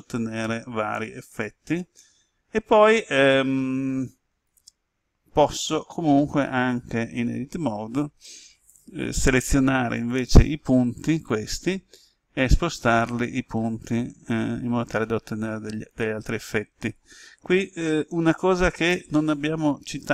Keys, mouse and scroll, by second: 4.4 right click, 9.9 click, 11.2 right click, 12.8-16.1 drag, 16.2 right click, 17.7 ctrl+z, 19.1-20.1 middle drag.